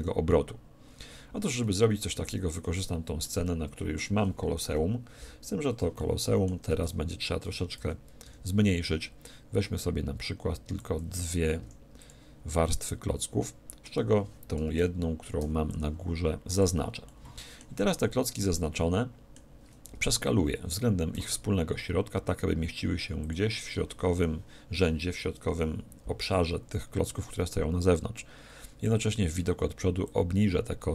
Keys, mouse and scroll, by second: 1.4 2, 2.1 3, 2.7-5.3 middle drag, 5.5 scroll down 1, 5.5-7.7 middle drag, 6.8 a, 7.4 a, 7.7 z, 8.2 b, 11.6 x, 12.5-14.4 middle drag, 15.4 b, 17.0-19.7 middle drag, 21.1 s, 23.3-25.2 drag, 28.6-30.0 middle drag, 30.0-30.9 drag.